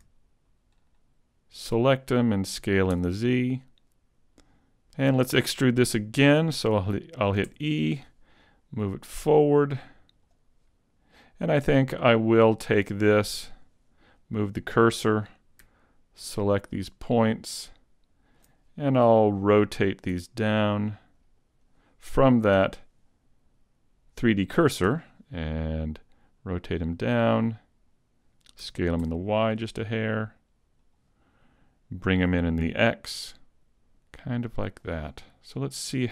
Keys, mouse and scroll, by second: 0.5 ctrl+click, 1.6 ctrl+click, 2.6 s, 2.6 s, 4.4 click, 4.4 alt+right click, 7.5 e, 8.0 click, 9.0 click, 12.1 right click, 13.4 shift+s, 16.7 ctrl+click, 18.4 ctrl+click, 20.1 r, 20.2 r, 22.6 ., 24.9 r, 27.9 click, 27.9 scroll down 1, 28.7 s, 31.0 click, 33.5 ctrl+,, 34.8 click, 35.6 middle click.